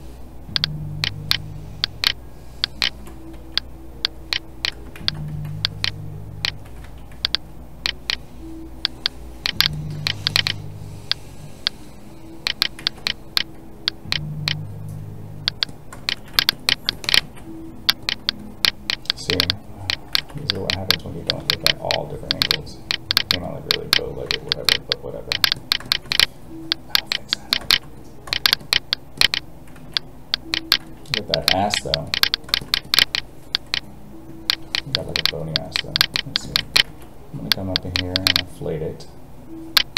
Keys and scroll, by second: 4.9 ctrl+z, 12.8 ctrl+z, 17.2 alt+a, 20.1 ctrl+z, 29.8 alt+a, 36.8 alt+a.